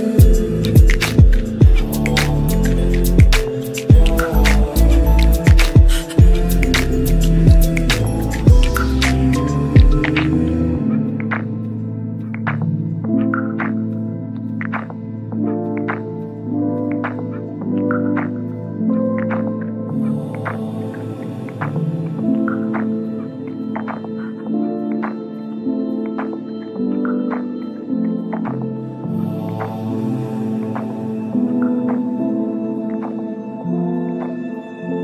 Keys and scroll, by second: 19.0 F3, 25.9 F9.